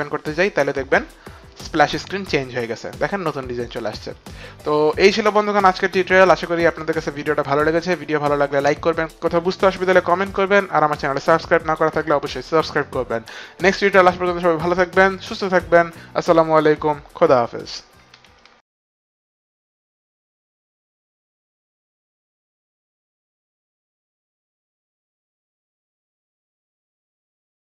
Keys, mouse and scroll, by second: 0.6 click.